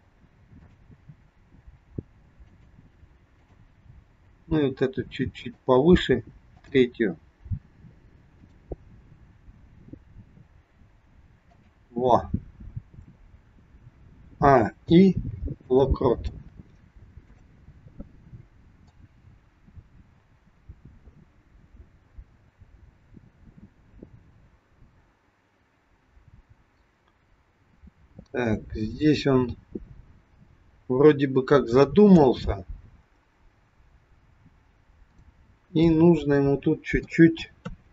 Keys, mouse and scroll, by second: 0.6 click, 1.7 g, 3.3 click, 4.1 g, 6.5 click, 8.4 click, 9.5 g, 12.7-14.2 scroll down 3, 14.2 a, 15.0 i, 17.4 click, 19.0 click, 35.1 click, 35.8 middle click, 37.7 KP_3.